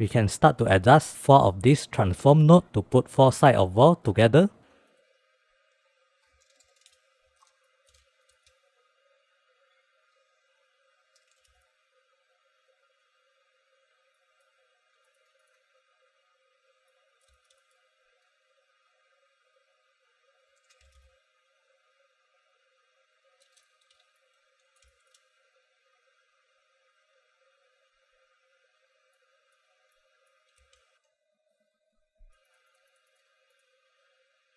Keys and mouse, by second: 0.7 click, 4.7 middle drag, 5.2 middle drag, 5.9 click, 6.5-7.6 drag, 8.0 middle click, 8.3 ctrl+z, 8.7 shift+middle click, 9.4 click, 9.6 click, 9.9 click, 10.0 click, 11.3 click, 13.6 middle click, 14.5 middle click, 15.5 middle click, 15.8 middle click, 16.5 click, 17.3-17.6 middle drag, 17.7 shift+middle click, 18.0 middle click, 19.5 click, 20.7 click, 23.1 click, 24.0-24.3 middle drag, 24.6-25.2 middle drag, 25.4 shift+middle click, 26.0 click, 27.4 click, 27.5 click, 27.6 click, 27.8 middle click, 28.5 click, 29.1 click, 29.2 middle click, 29.5-29.9 middle drag, 30.3-30.7 middle drag, 32.4 middle click, 32.5 click, 32.7 click, 32.9 click, 33.3 middle drag, 33.5 middle click, 34.0 middle click.